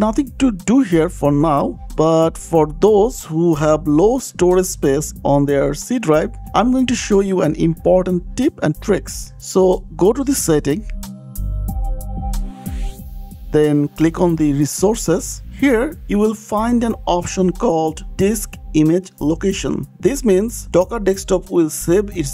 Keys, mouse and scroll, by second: 5.1 click, 6.5 click, 7.5 click, 9.5 click, 12.3 click, 14.3 click, 18.4 click.